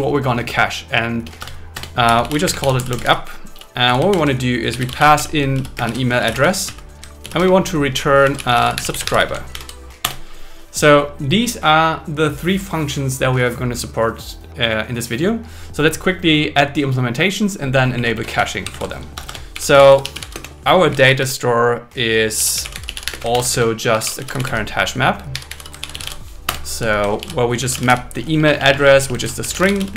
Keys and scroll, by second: 1.4 Return, 2.4 space, 4.1 shift+8, 5.3-9.2 typing, 9.5 alt+8, 10.0 Return, 17.9 Up, 18.7 super+Right, 19.1 Return, 20.3 space, 23.1 space, 23.3 shift+o, 23.5 space, 23.9 shift+c, 25.9 shift+h, 26.5 Return, 27.2-29.9 typing.